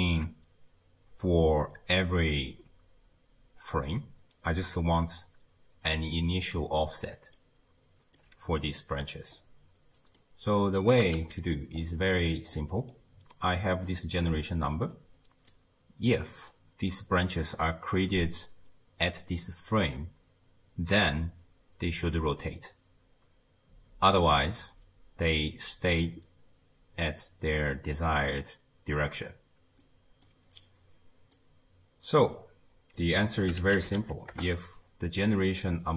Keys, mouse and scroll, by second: 7.1 d, 7.4 right click, 8.2 d, 8.8 middle click, 9.4-10.2 scroll down 1, 10.2 click, 11.0 g, 11.8 middle click, 12.1-12.6 scroll up 1, 12.6-13.9 middle drag, 13.9 click, 14.9-16.1 middle drag, 16.1 click, 29.8-31.4 middle drag, 31.4 drag, 35.6-35.9 middle drag.